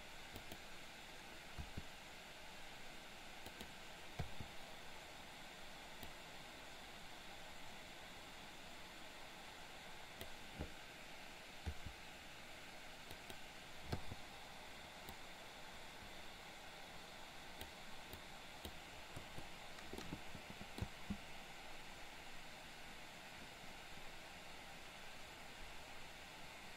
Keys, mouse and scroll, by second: 0.3 click, 1.6 r, 4.2 i, 6.1-10.2 drag, 11.7 r, 14.0 i, 15.1-17.6 drag, 18.2-18.7 drag, 19.2 Delete, 20.0-20.8 middle drag, 20.8 space.